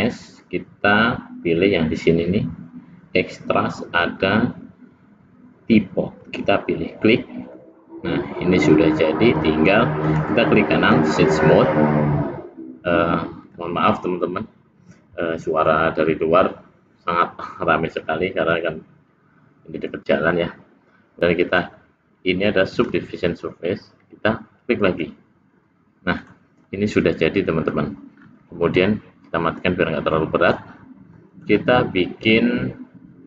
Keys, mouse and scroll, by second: 7.5 middle click, 10.0 right click, 13.4 click, 21.5 click, 24.9 click, 26.2 click, 26.6 middle click, 28.2 scroll down 1, 29.5 click, 30.2 middle click, 31.2 middle click.